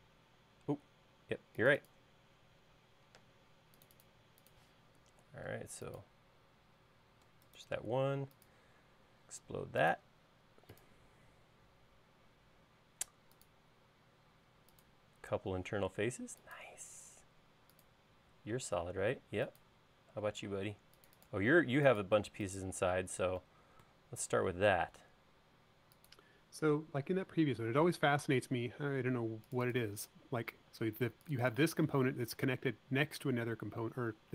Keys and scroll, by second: 4.1 space, 31.6 space.